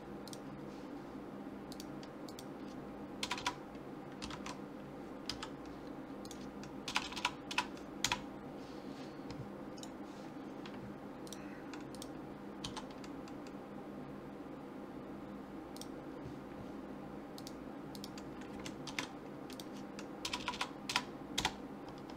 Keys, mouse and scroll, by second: 1.7-3.4 drag, 3.4 BackSpace, 7.0 BackSpace, 7.1 BackSpace, 9.8 click, 11.3 click, 11.3 right click, 17.4-19.1 drag, 20.4 BackSpace, 20.5 BackSpace.